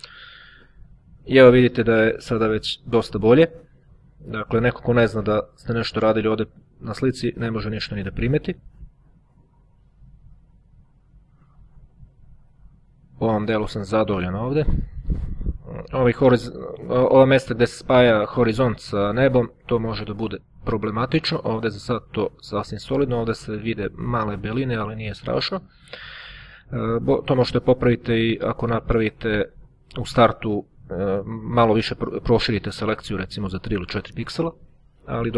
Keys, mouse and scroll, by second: 3.2-4.2 drag, 4.4-5.4 drag, 5.8-6.8 drag, 6.8 middle click, 7.2 click, 8.7-9.2 ctrl+scroll down 2, 9.8-10.8 ctrl+drag, 11.4-11.9 ctrl+scroll down 2, 12.2 ctrl+click, 13.5 click, 14.6-15.8 ctrl+scroll up 2, 16.4 ctrl+click, 17.3 click, 20.1 click, 21.8 click, 27.0-27.6 ctrl+scroll up 2, 31.0-31.6 ctrl+scroll down 2, 32.2-32.8 ctrl+scroll up 2.